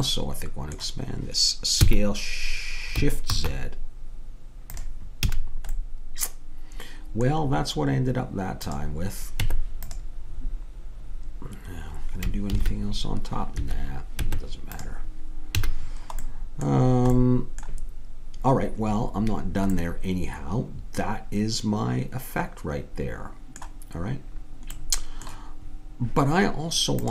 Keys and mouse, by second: 1.8 s, 5.3 a, 8.7 click, 9.4 Tab, 12.6 ctrl+r, 14.3 Tab, 15.6 a, 19.1-21.7 middle drag, 24.8-27.1 middle drag.